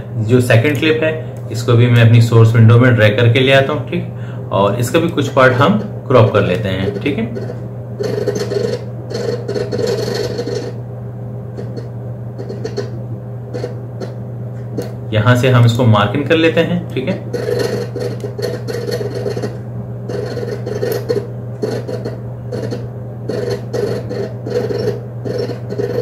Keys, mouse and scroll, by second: 1.0-4.6 drag, 5.4-26.0 drag.